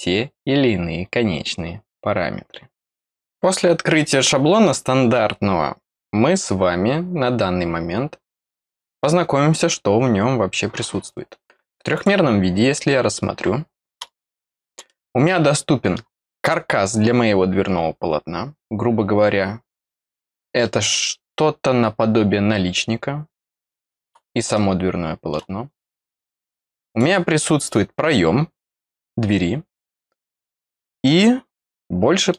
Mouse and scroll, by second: 11.9 click, 14.8-15.9 middle drag, 16.2-17.3 scroll up 1, 17.3-19.6 scroll up 1, 19.6 click, 20.6-24.0 middle drag, 24.5 middle click, 26.8 click, 30.4 middle click, 31.0-32.3 middle drag.